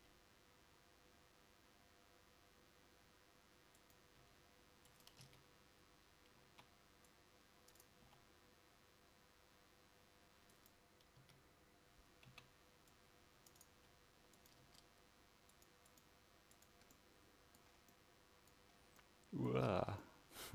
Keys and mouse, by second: 0.0 g, 4.3 g, 5.3 a, 8.2 c, 10.6 g, 11.3 a, 14.5 c, 14.5 g, 14.8 Tab.